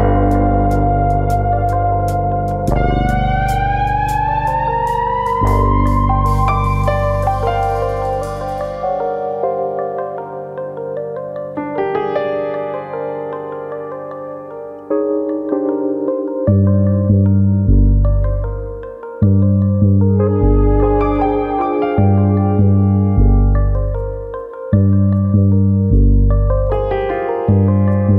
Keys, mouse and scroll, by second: 0.6 scroll up 1, 0.8 middle click, 1.6 KP_1, 3.7 click, 5.1 click, 6.9 click, 7.6 KP_3, 8.9 shift+click, 9.2 shift+click, 9.6 middle click, 10.5 shift+click, 11.1 shift+click, 11.4 middle click, 11.9 ctrl+z, 12.2 shift+click, 12.6 middle click, 13.5 click, 14.3 KP_3, 15.5 click, 16.7 click, 18.2 middle click, 18.7 middle click, 19.4 middle click, 19.9 click, 20.6 middle click, 21.3 KP_1, 24.8 click, 26.0 click.